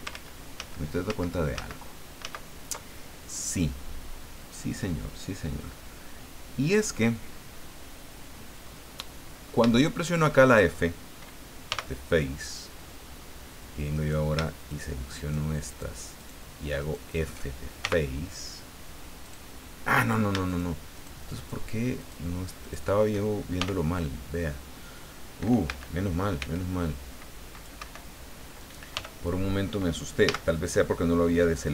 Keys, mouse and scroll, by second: 0.1 ctrl+z, 2.2 ctrl+z, 2.9 ctrl+scroll down 2, 7.3 scroll down 2, 9.7 shift+middle click, 11.6 f, 12.3-12.6 scroll up 2, 13.9 right click, 14.7 shift+right click, 15.1 shift+right click, 15.7 shift+right click, 16.2 shift+right click, 16.8 shift+right click, 17.8 shift+f, 19.2 right click, 20.4 shift+right click, 20.9 shift+right click, 21.3 shift+right click, 22.0 shift+right click, 22.6 shift+right click, 23.5 shift+f, 25.6 a, 26.3 c, 26.8-27.9 drag, 27.7 Escape, 28.9 f, 30.2 a.